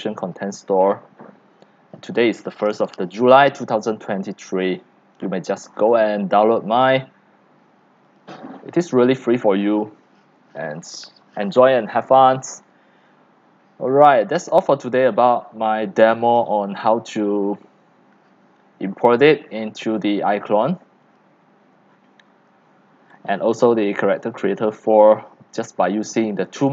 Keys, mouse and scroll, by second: 1.3 drag, 3.8 click, 4.5 click, 5.3-6.9 middle drag, 5.3-5.6 scroll down 7, 5.6-6.0 scroll up 7, 6.0-6.9 scroll down 8, 6.9 scroll, 8.2-12.3 drag, 19.3-21.9 drag, 21.9-22.6 scroll down 10, 22.6 scroll up 7, 22.8-23.9 typing, 22.8 scroll down 1, 23.6-25.1 drag, 25.1 middle click, 25.7 x, 26.1 click, 26.3 c.